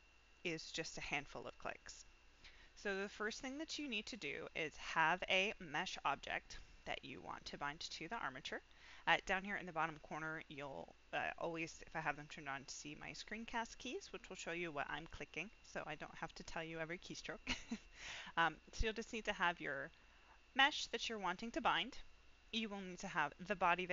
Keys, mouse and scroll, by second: 3.2 click, 4.2-4.7 middle drag, 18.2-18.6 middle drag, 18.9 click, 19.3-19.7 middle drag, 21.4-21.7 middle drag, 22.7 click.